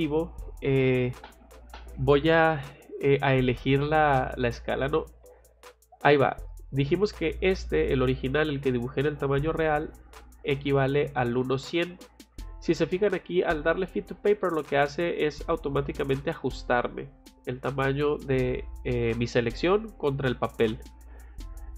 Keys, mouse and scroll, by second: 3.6 click, 11.2 click, 13.4 click, 13.8 click.